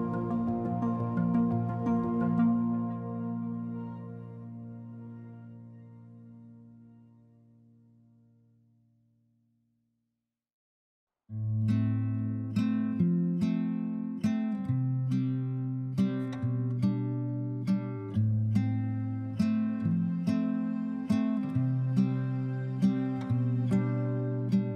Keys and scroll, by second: 17.1 b.